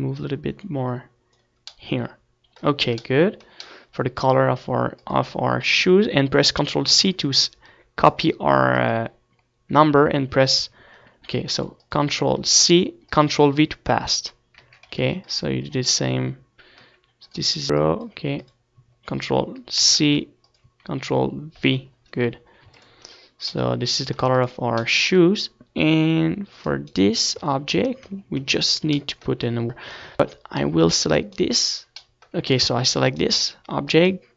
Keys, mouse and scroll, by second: 3.4-14.5 middle drag, 14.5-22.3 drag, 23.9 click, 24.6 middle click, 25.0 ctrl+s, 25.4 middle click, 26.5 ctrl+s, 29.3 right click, 29.8 Tab, 30.5 Tab, 30.9 Tab, 32.6 Tab, 33.0 Tab.